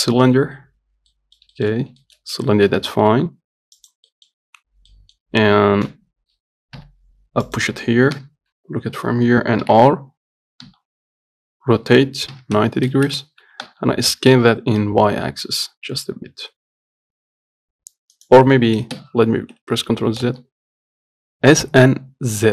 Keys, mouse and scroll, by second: 1.4 middle click, 2.0 scroll up 1, 2.3 shift+middle click, 2.9 s, 4.4 middle click, 4.9 scroll down 1, 5.2 middle click, 6.1 KP_7, 7.0 g, 8.4 KP_3, 9.9 r, 19.2 ctrl+z, 20.2 s.